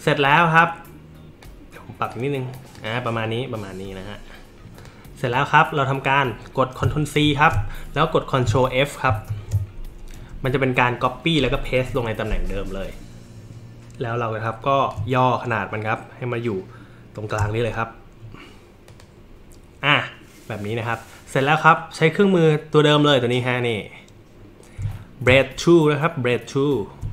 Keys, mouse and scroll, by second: 1.4-2.1 drag, 2.5 click, 4.8 click, 5.2 click, 7.2 ctrl+c, 9.1 ctrl+f, 14.9-17.3 alt+shift+drag, 18.9 click.